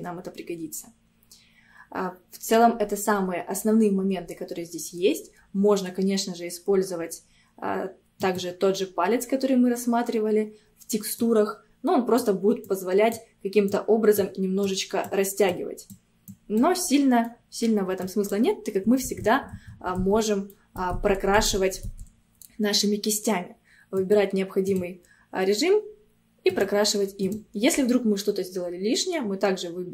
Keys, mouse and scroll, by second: 8.2-17.3 drag, 17.3 middle click, 18.1-19.1 drag, 19.1 ctrl+z, 19.6 ctrl+z, 20.6 middle click, 21.0 ctrl+z, 21.5 ctrl+z, 24.0 click, 26.5-29.9 drag.